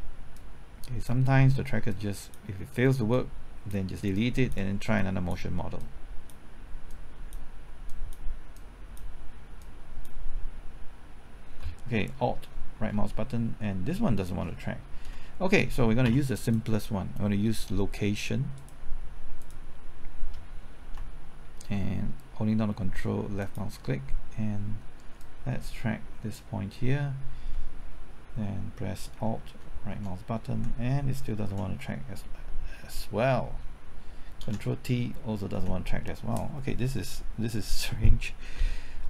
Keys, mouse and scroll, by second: 0.3-1.5 drag, 1.5 click, 4.2 click, 12.2 typing, 12.8 alt+Right, 15.1 Left, 16.1 typing, 16.4-17.5 drag, 21.0 typing, 23.4 ctrl+click, 25.2-26.5 drag, 29.9 alt+Right, 31.5 Left, 33.5 ctrl+t, 34.4 ctrl+t, 35.6 Left.